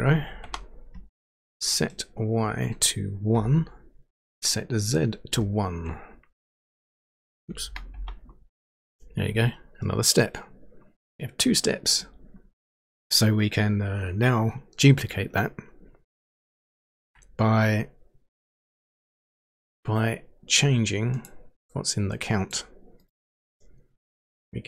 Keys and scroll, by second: 0.4 Return, 3.4 1, 7.6 BackSpace, 7.9 Return.